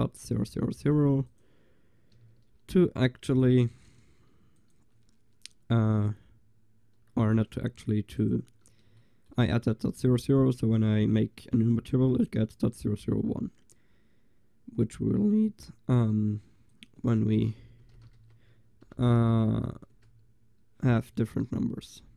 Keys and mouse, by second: 1.3-2.1 drag, 2.2 click, 2.2 a, 3.0 click, 3.3-6.6 drag, 9.0-11.1 middle drag, 16.8-19.4 drag, 19.4 0, 19.5 0.